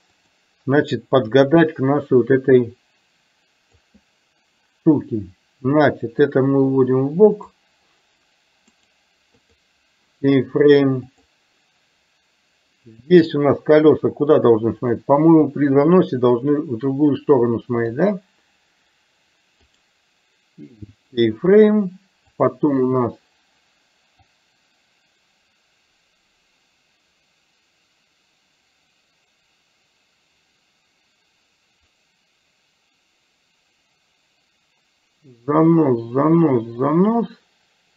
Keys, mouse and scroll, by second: 1.4-3.9 drag, 6.4-7.6 drag, 8.7 right click, 11.1 click, 15.0 click, 15.9-18.0 drag, 19.9-21.2 right drag, 24.5-37.9 drag.